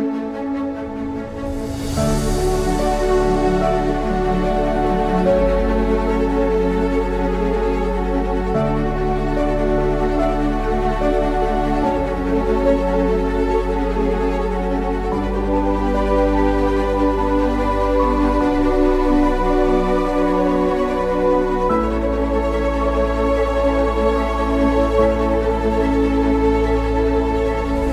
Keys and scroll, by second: 0.0-3.0 typing, 4.0-9.2 typing, 10.2-11.6 typing, 13.9-27.9 typing.